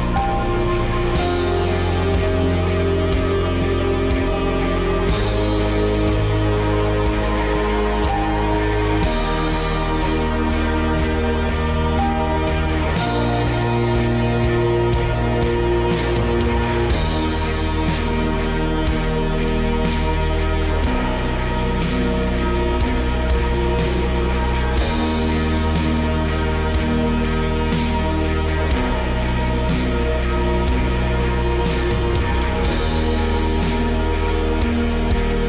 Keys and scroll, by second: 16.6 ctrl+c, 17.2 ctrl+v, 17.3 Return, 17.8 BackSpace, 18.3 ctrl+v, 18.4 BackSpace, 18.7 Return, 25.4 ctrl+c, 25.7 ctrl+v, 26.4 ctrl+v, 26.5 ctrl+c, 26.7 3, 27.2 ctrl+v, 27.2 ctrl+c, 27.6 2, 28.0 ctrl+v, 28.4 3, 28.9 ctrl+v, 29.5 ctrl+v, 29.8 BackSpace, 31.2 4, 33.2 5.